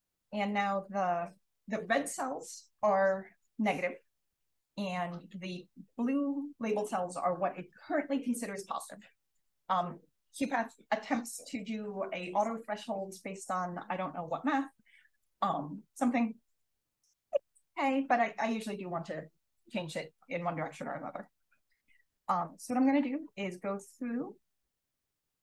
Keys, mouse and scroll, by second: 0.4 click, 4.7-5.6 scroll up 1, 5.6-6.3 scroll up 1, 6.3 click, 6.3-7.7 scroll up 1, 7.7-15.4 scroll up 1, 15.4-16.0 scroll up 1, 16.0-16.8 scroll up 1, 16.8-17.4 scroll down 1, 17.4-18.8 drag, 17.4-18.0 scroll down 1, 18.0-18.8 scroll down 1, 18.8-19.6 scroll down 1, 19.6-21.9 scroll up 1, 21.2 click, 21.9 click, 21.9 scroll up 1, 22.4-25.4 typing, 23.8 click, 24.0-25.1 scroll up 2.